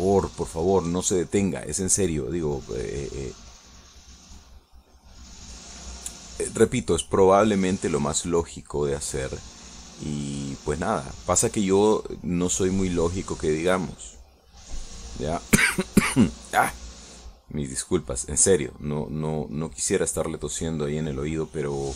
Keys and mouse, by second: 1.0 shift+middle click, 1.7-2.7 shift+middle drag, 4.0-8.9 drag, 11.4 click, 11.7-15.3 drag, 15.4 click, 16.0 click, 18.6-20.6 drag, 20.8-21.9 drag.